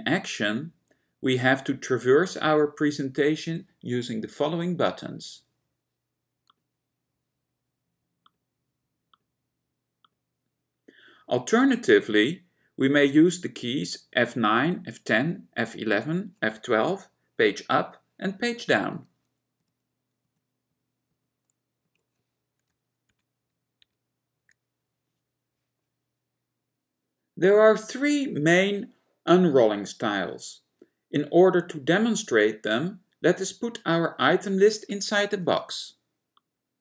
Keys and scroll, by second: 19.7 F9, 20.3 F11, 20.8 F11, 21.2 F11, 21.9 F10, 23.2 Page_Up, 23.9 Page_Down.